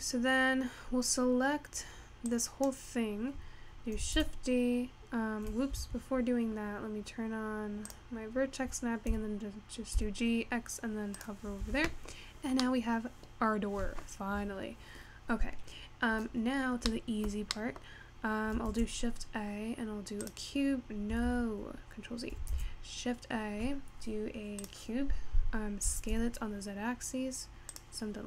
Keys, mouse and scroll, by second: 0.7-1.1 scroll down 3, 2.1 scroll down 1, 2.4 click, 4.3 shift+d, 8.0 click, 9.4 g, 11.7 Tab, 12.5 scroll down 2, 12.7-14.5 middle drag, 14.5-15.6 scroll up 1, 15.6-16.3 scroll down 2, 16.6-18.0 scroll down 1, 18.0-18.5 scroll up 1, 18.5-19.0 scroll up 1, 19.0 shift+a, 22.1 ctrl+z, 22.6 shift+a, 25.1-25.9 scroll down 2, 25.9 s, 28.1-28.2 scroll up 3.